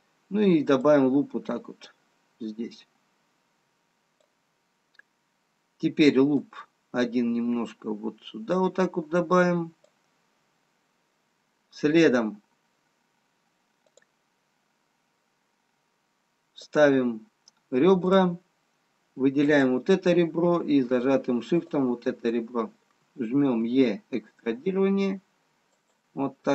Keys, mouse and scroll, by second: 2.0 click, 7.1 click, 15.6 click, 21.8 shift+click, 22.0 shift+click, 23.6 e.